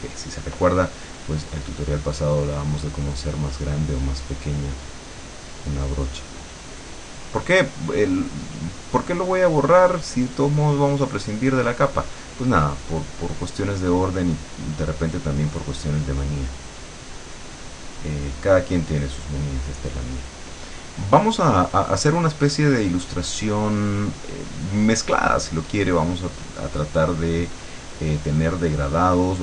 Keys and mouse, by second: 2.9-13.9 drag, 14.9-20.3 drag, 20.9-29.4 drag.